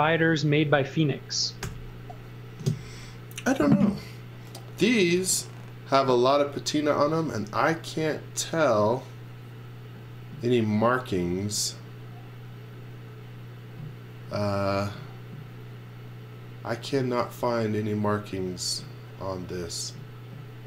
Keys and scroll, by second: 1.6 g.